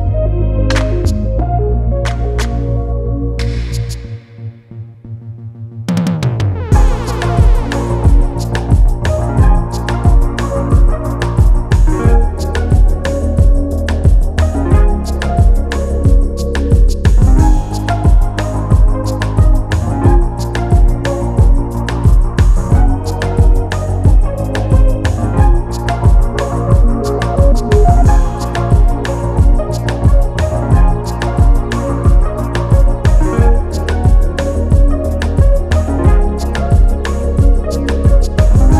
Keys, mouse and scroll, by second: 0.2 alt+click, 0.7 g, 1.3 alt+click, 2.1 g, 2.8 alt+click, 3.4 g, 4.3 alt+click, 4.7 g, 5.3 alt+click, 5.9 g, 6.5 alt+click, 7.1 g, 8.1 alt+click, 8.5 g, 9.2 click, 9.9 g, 10.6 alt+click, 11.2 g, 12.0 scroll down 2, 12.2 scroll up 2, 13.0 shift+middle click, 13.3 scroll down 1, 14.0 click, 14.9 Tab, 15.2 scroll up 2, 15.4-15.9 scroll down 1, 15.9 scroll down 1, 16.0 click, 16.6-18.0 right drag, 18.2-18.5 scroll down 3, 18.5 click, 19.0 scroll down 3, 19.1 click, 19.7 click, 20.1-23.2 drag, 23.2 scroll down 1, 23.3 scroll up 1, 23.5-24.3 scroll down 1, 24.3-33.2 drag, 33.2 KP_0, 34.4-37.9 drag, 37.9-38.6 scroll down 1, 38.6 click.